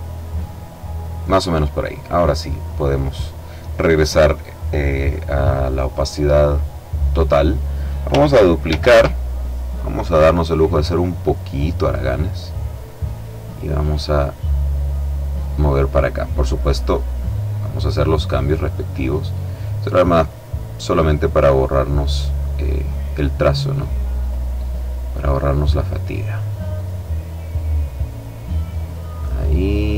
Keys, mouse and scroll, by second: 2.0 click, 5.6 click, 8.2 ctrl+d, 10.0 click, 12.1-17.3 drag, 18.0 click, 19.7-21.4 drag, 21.9-23.5 drag, 23.7 click, 24.7 click, 26.3-28.9 drag, 29.1-29.9 drag.